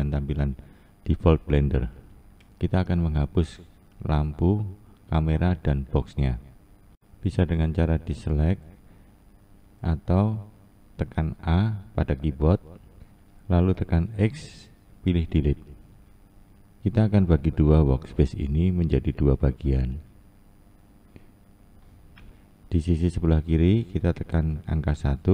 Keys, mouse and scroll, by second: 0.0 Down, 6.8-7.8 drag, 10.5 click, 10.8 a, 16.5-21.5 drag, 22.4 click, 24.1 KP_1.